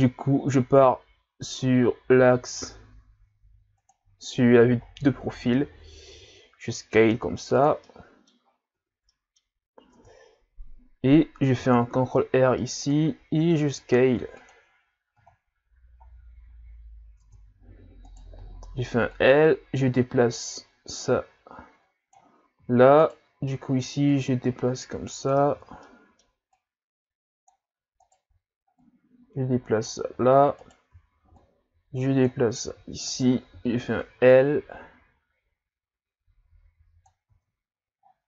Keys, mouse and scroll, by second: 1.0 s, 4.2 scroll down 3, 4.8-5.9 scroll down 4, 7.0 s, 7.8 middle click, 8.4-8.8 scroll up 1, 8.8 Tab, 9.1 middle click, 9.5 scroll up 3, 9.9 Tab, 11.6 ctrl+r, 15.2 Tab, 16.1-16.4 scroll down 1, 16.7-17.2 scroll up 2, 17.2 Tab, 18.1 right click, 18.4 l, 19.1 click, 23.0 alt+right click, 24.1 click, 25.6 ctrl+z, 25.8 middle click, 26.5 click, 28.0 alt+right click, 28.8 click, 30.6 alt+right click, 31.4 click, 33.1 right click, 33.5 l, 34.3 click, 37.3 Tab, 38.0-38.2 scroll down 2.